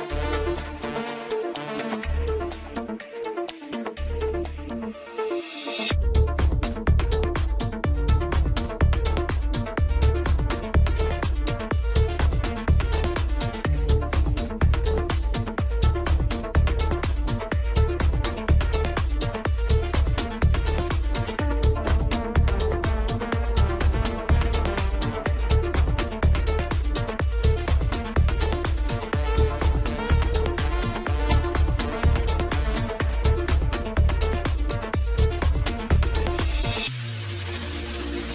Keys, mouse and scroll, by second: 1.8-2.2 scroll up 2, 2.6-3.6 middle drag, 3.6-4.1 scroll down 2, 4.1-5.1 scroll up 2, 5.1 click, 6.7 click, 8.4-10.0 drag, 10.0-11.4 scroll down 1, 12.9-16.0 drag, 17.9-18.4 scroll up 2, 18.4-19.9 middle drag, 19.9 scroll up 1, 21.5-23.2 scroll down 2, 24.0-25.5 drag, 25.5 KP_0, 28.7-29.1 scroll down 1, 29.3 drag, 29.7-32.2 middle drag, 32.6 click, 34.3 click, 35.0 KP_0, 36.2 click, 37.1 KP_0, 38.2 scroll down 1.